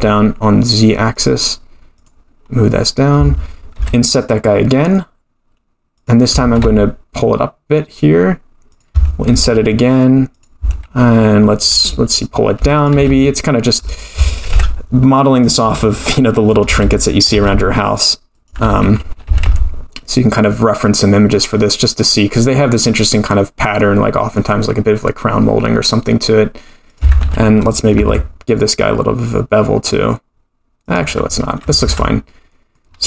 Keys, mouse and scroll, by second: 1.9 click, 3.8 i, 6.4 g, 9.3 i, 12.6 e, 13.0 g, 14.5 i, 16.7 e, 17.3 g, 18.7 ctrl+z, 19.3 g, 22.3-24.7 drag, 28.0 ctrl+b, 31.8 Tab, 32.2-32.8 middle drag, 32.8-33.0 scroll down 1.